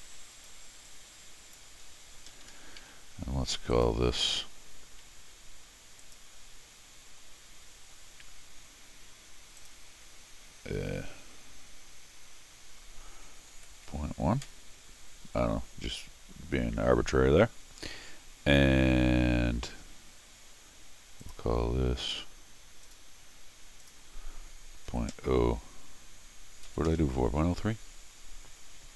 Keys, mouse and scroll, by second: 0.9 click, 2.3 Escape, 2.4 Escape, 3.7 click, 6.0 click, 9.6 click, 19.8 middle click, 21.2 click, 22.8 click, 23.8 click.